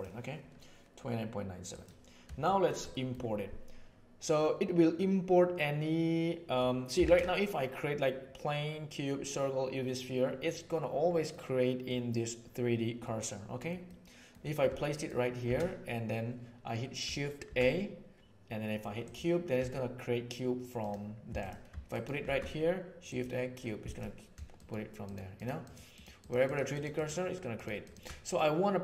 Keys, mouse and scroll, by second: 1.6 right drag, 2.4 shift+middle click, 2.8 middle click, 4.9-6.5 middle drag, 7.0 shift+a, 11.2-11.8 middle drag, 13.0-13.7 middle drag, 13.8-14.2 middle drag, 15.4 shift+a, 17.4 shift+a, 19.5 s, 21.2 x, 21.8 shift+right click, 22.2 shift+a, 23.8 x, 24.5 shift+click, 25.0 shift+click, 25.2 shift+click, 25.6 shift+click, 25.9 shift+drag, 26.4-26.8 shift+drag, 27.8 shift+click.